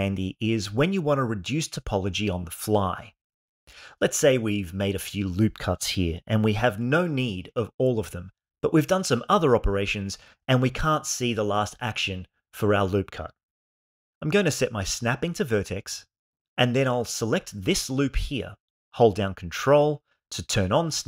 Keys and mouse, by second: 0.8 Tab, 3.0 Tab, 4.4 ctrl+r, 4.8 3, 5.5 click, 5.7 click, 7.5 ctrl+r, 7.8 2, 8.1 click, 9.7 ctrl+r, 11.1 6, 11.5 click, 14.5-16.6 drag, 18.9 alt+shift+click.